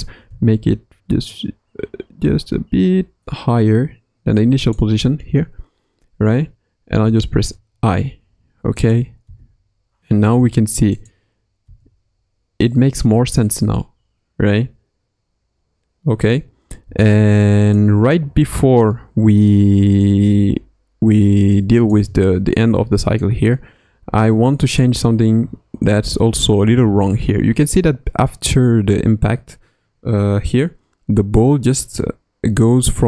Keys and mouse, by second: 7.0 i, 9.2 space, 10.3 space, 10.9 click, 11.6 space, 16.8 space, 17.7-21.9 drag, 23.2-33.0 drag.